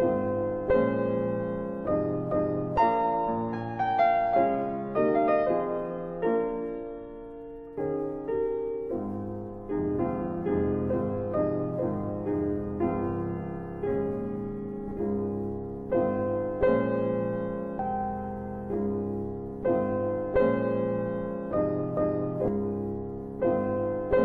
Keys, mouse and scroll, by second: 0.2 click, 0.9-1.6 typing, 3.6 click, 7.2 middle click, 8.0-8.3 scroll up 1, 8.5 middle click, 10.4 click, 12.4 click, 15.8 right click, 21.7 click.